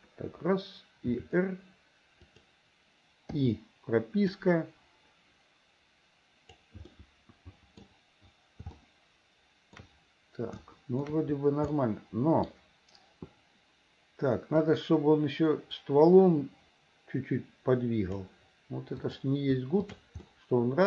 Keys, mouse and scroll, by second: 1.2 r, 3.4 i, 4.4-6.7 drag, 7.0 middle click, 8.9 shift+middle click, 10.6 shift+middle click, 11.7 middle click, 14.7-18.3 drag, 19.1 click, 19.8 shift+click, 20.3 middle click.